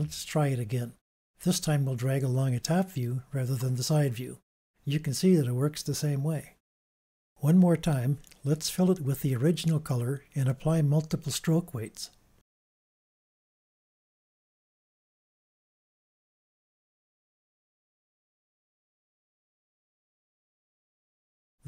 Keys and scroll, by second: 17.7 super+z.